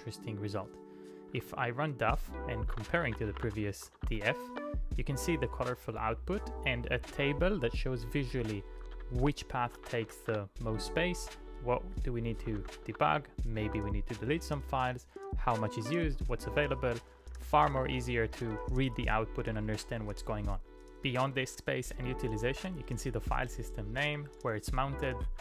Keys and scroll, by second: 1.4 ctrl+p, 2.7-4.6 typing, 5.6 ctrl+c, 8.6-10.5 typing, 12.0-14.0 typing, 15.5-16.4 typing, 17.7 [, 18.5 ctrl+u, 23.0 j, 24.1-25.4 typing.